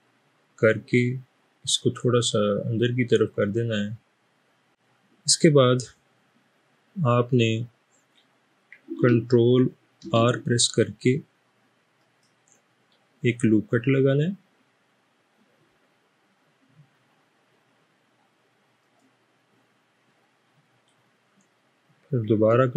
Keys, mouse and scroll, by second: 10.1 ctrl+r, 18.8 click.